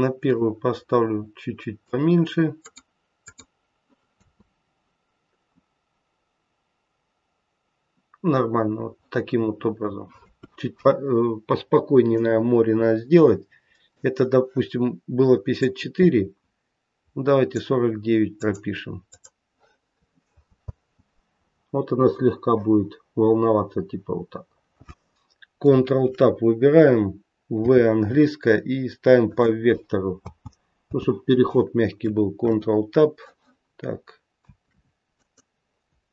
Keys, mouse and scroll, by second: 0.2 click, 2.5 click, 3.2 click, 4.0 space, 8.1-10.2 scroll down 1, 10.2 space, 12.2 click, 15.6 click, 18.4 click, 19.0 click, 20.5 space, 23.9 scroll up 1, 24.5-26.1 scroll down 1, 26.1 ctrl+Tab, 26.1-26.9 scroll down 1, 27.5 v, 30.2 space, 32.3 ctrl+Tab, 35.9 Tab.